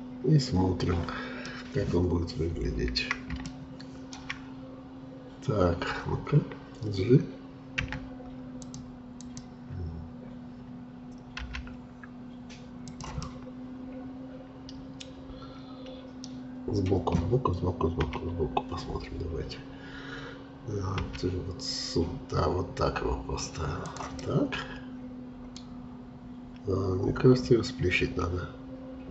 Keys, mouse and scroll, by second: 2.7-3.5 scroll up 2, 3.5-4.5 shift+middle drag, 4.5-7.4 scroll up 1, 7.7 d, 9.2-11.4 drag, 11.4 g, 13.2-16.2 middle drag, 18.1 KP_3, 21.0 g, 24.2-25.6 middle drag, 25.6-28.4 scroll down 1, 28.4 scroll down 1.